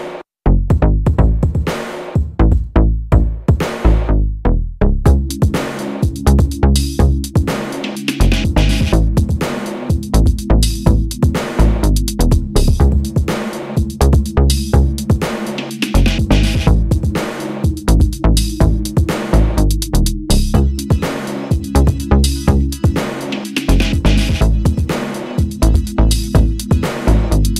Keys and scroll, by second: 4.2 super+d, 5.6 Down, 5.7 Right, 5.9 Right, 6.6 Up, 6.9 Right, 8.3 Up, 25.8 Up.